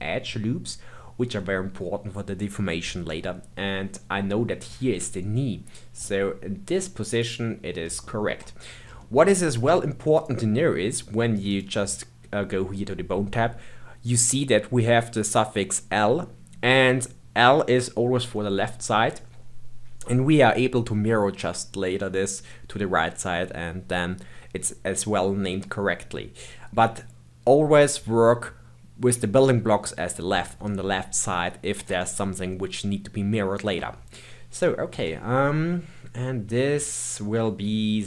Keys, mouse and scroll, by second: 6.0 g, 7.4-8.0 scroll down 2, 8.0-10.2 shift+middle drag, 10.2 click, 11.5 click, 34.5 click, 34.9 g.